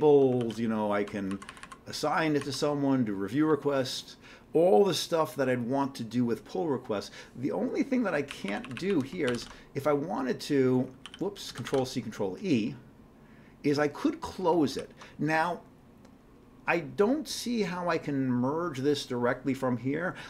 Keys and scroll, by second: 8.3 Up, 8.8 Up, 9.3 ctrl+c, 9.4 ctrl+c, 11.1 ctrl+g, 11.5 ctrl+c, 11.7 ctrl+e, 14.7 ctrl+g.